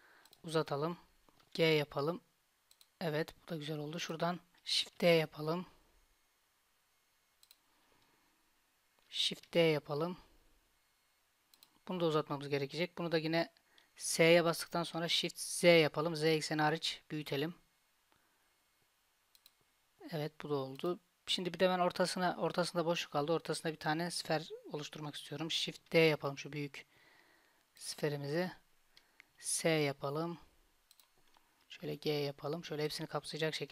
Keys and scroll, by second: 1.5 g, 5.1 shift+d, 9.6 shift+d, 14.2 s, 26.0 shift+d, 29.4 s, 31.9 g.